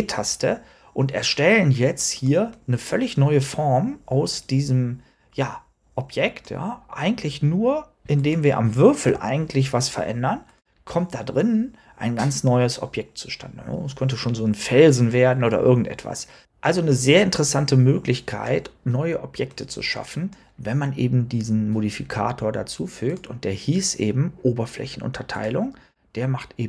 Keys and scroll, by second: 8.9 g.